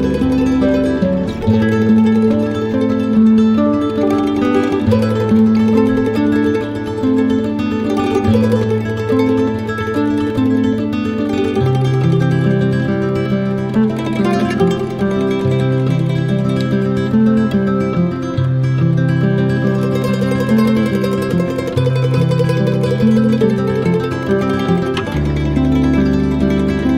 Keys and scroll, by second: 9.0 space.